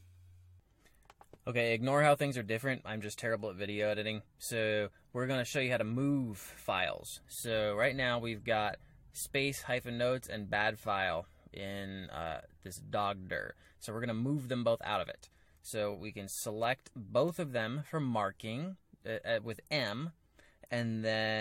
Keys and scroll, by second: 7.2-10.1 typing, 12.0 k, 13.3 j, 16.6 m, 17.2 m.